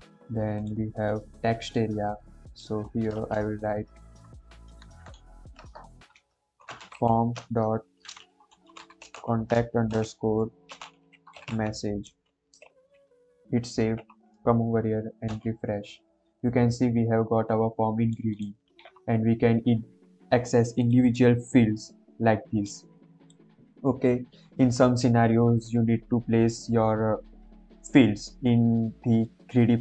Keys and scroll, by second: 3.1 BackSpace, 4.6-11.9 typing, 11.9 Escape, 12.6 ctrl+s.